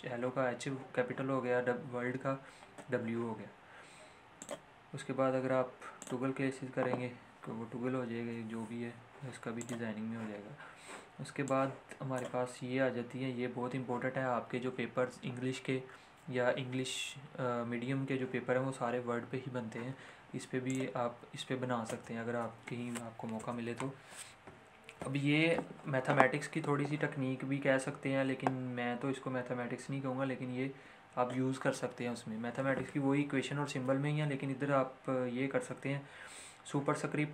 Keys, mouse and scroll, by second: 4.4 click, 8.6 ctrl+z, 9.6-20.6 drag, 21.8 space, 23.3 Return.